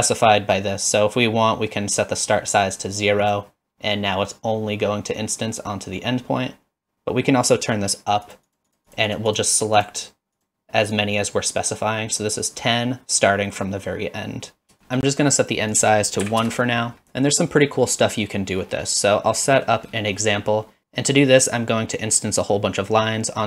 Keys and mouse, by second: 3.2 click, 8.3 click, 8.7 click, 8.9 click, 9.1 click, 9.3 click, 10.4 click, 10.8 click, 15.7-16.9 drag, 19.6 middle click, 20.2 middle click.